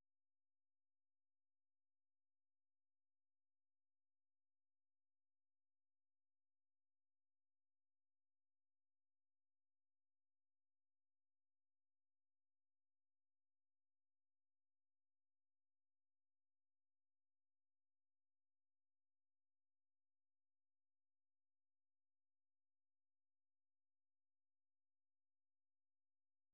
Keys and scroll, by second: 0.0-2.8 typing, 4.3-9.3 typing, 20.1-20.8 typing, 22.2 super+2, 24.4 F6, 25.8-26.5 typing.